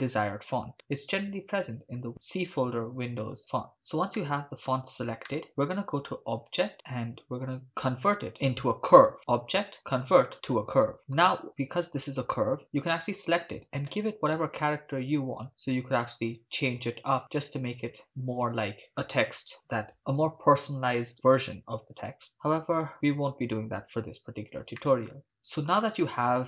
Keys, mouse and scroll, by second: 4.2-4.7 shift+middle drag, 5.3 ctrl+middle click, 6.5 click, 9.2 click, 11.0 shift+middle click, 11.8 Tab, 12.6 right click, 13.9 g, 14.4 z, 18.0 shift+click, 18.9 Tab, 22.4 ctrl+z, 22.9 ctrl+z, 23.9 Tab, 24.8-25.1 shift+middle drag, 25.1 shift+scroll down 1, 25.2 ctrl+middle click.